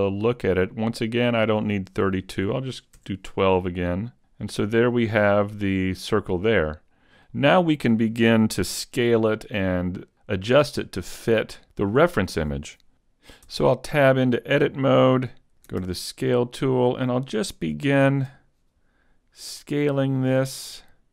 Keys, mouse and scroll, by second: 1.3 click, 3.0 click, 4.4 middle click, 5.1-5.7 scroll down 3, 5.5 middle click, 13.0 right click, 13.5 Tab, 15.8 ctrl+alt+Right, 17.1-17.8 scroll up 1, 17.8 shift+middle click, 17.8 scroll up 1, 19.7 click.